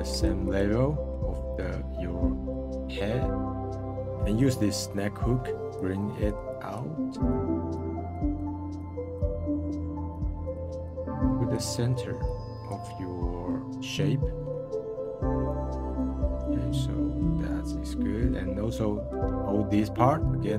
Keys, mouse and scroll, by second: 0.9-2.7 middle drag, 3.2-4.1 middle drag, 4.1 f, 5.7-9.8 drag, 9.8 middle drag, 10.1 f, 10.6 f, 10.8-11.7 drag, 11.7-12.2 middle drag, 12.2-12.9 drag, 12.9-14.2 middle drag, 14.7 middle click, 15.4 f, 15.9 f, 16.2-17.3 middle drag, 18.1-20.3 middle drag, 20.3-20.5 drag.